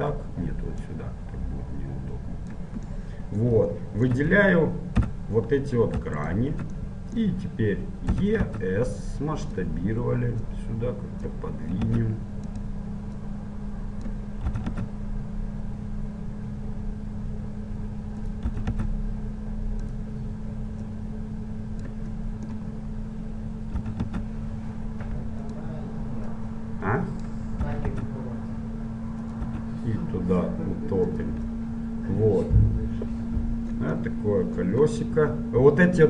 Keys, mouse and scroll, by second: 1.1-2.6 drag, 3.1-6.3 middle drag, 5.1 z, 6.3-8.2 right drag, 8.2 middle click, 8.2 e, 10.6-12.6 drag, 12.1 s, 13.3-15.2 drag, 14.7 e, 18.6 e, 21.0-23.0 drag, 23.0-24.1 middle drag, 23.9 e, 24.1-24.9 scroll up 1, 24.9 middle click, 26.5-28.4 drag, 27.9 e, 29.6 e, 31.7-33.5 middle drag, 34.2-36.0 middle drag.